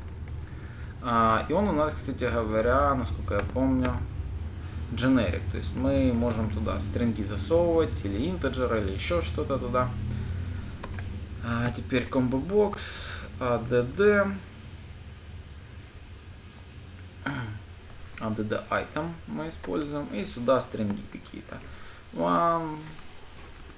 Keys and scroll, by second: 8.1 Escape, 12.6 Return, 20.2 Return.